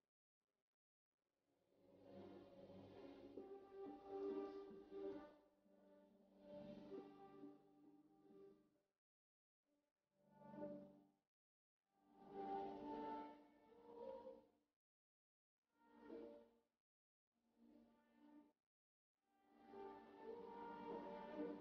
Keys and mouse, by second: 0.2 ctrl+z, 4.1 KP_7, 4.2 middle click, 4.8 KP_9, 11.6-13.1 middle drag, 11.8 click, 11.8 right click, 13.9 ctrl+e, 15.3 middle click, 15.6-19.2 middle drag, 19.6-21.4 drag.